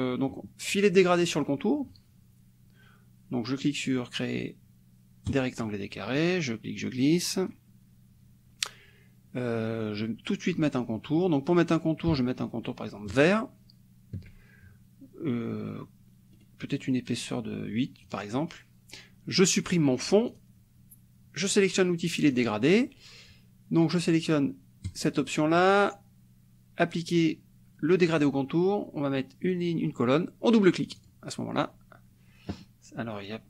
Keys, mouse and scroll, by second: 5.4 click, 6.2-7.7 drag, 13.1 shift+click, 16.4 right click, 18.0 click, 20.3 click, 22.2 click, 24.9 click, 28.1 click, 30.9 click.